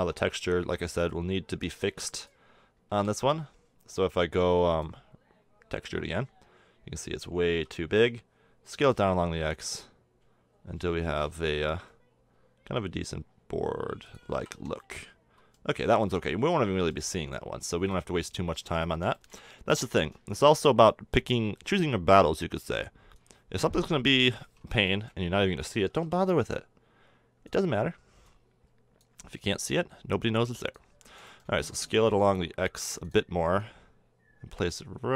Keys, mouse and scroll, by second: 0.0 Tab, 0.6 Tab, 2.9 b, 7.5 s, 14.3 a, 14.5 Tab, 15.7 a, 20.4 shift+d, 21.7-23.1 drag, 23.9 KP_7, 25.9 s, 31.3 middle drag, 31.6 s, 33.6-35.1 drag.